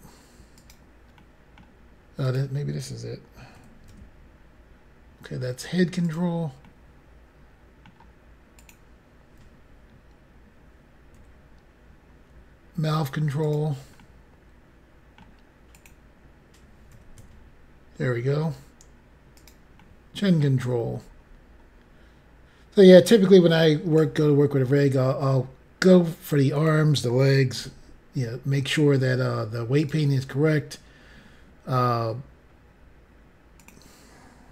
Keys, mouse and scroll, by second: 0.6 right click, 1.1 middle click, 2.2 click, 3.5-3.9 typing, 6.0 right click, 6.7 middle click, 7.1 scroll up 1, 7.8 middle click, 7.8 scroll down 1, 8.5 click, 11.1 g, 13.4 right click, 14.0 middle click, 14.3 scroll up 1, 15.7 click, 16.6-17.7 typing, 19.3 right click, 19.8 middle click, 20.7-21.2 scroll down 5, 23.2 click, 26.5 click, 27.6 g, 29.8 right click, 30.4 scroll up 2, 33.6 click.